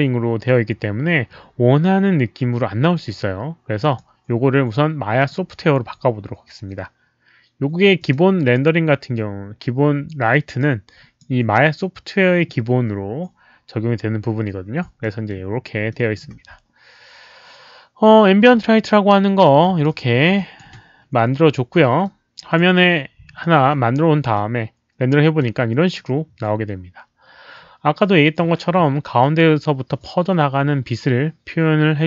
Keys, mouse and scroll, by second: 3.8 click, 5.1 click, 7.9 click, 10.5-11.1 drag, 12.8 click, 15.0 alt+middle click, 15.2 click, 15.8 alt+middle click, 19.6 click, 20.3 ctrl+click, 22.0 ctrl+click, 22.0 alt+middle click, 23.3 alt+middle click, 23.7 ctrl+click, 24.3-25.4 drag.